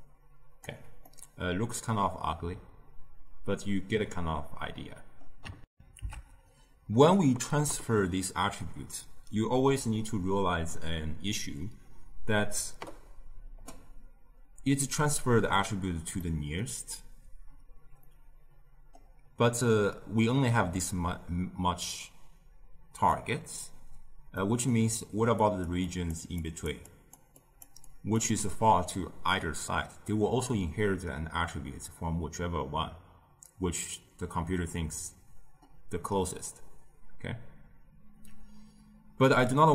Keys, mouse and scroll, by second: 1.0-4.1 middle drag, 5.6 ctrl+alt+shift+q, 16.1-24.8 middle drag, 24.8-28.2 typing, 25.3 click, 25.8 click, 26.3 drag, 26.8 drag, 27.3 click, 27.7 click.